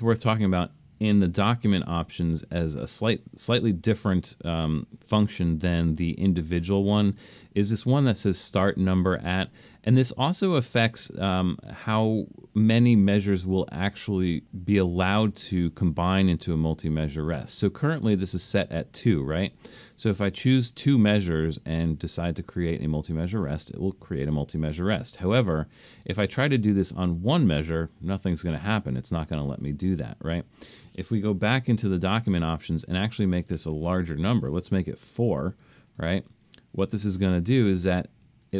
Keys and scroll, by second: 1.4 alt+super+a, 24.2 super+z, 31.6 alt+super+a, 34.3 4.